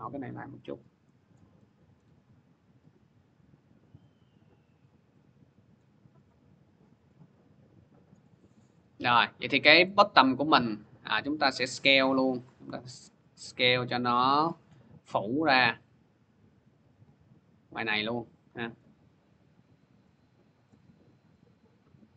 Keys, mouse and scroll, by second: 1.1 click, 1.8 middle click, 5.5 click, 7.9 click, 9.6 click, 9.7-10.9 middle drag, 10.9-15.7 drag, 18.5 click, 20.5 click.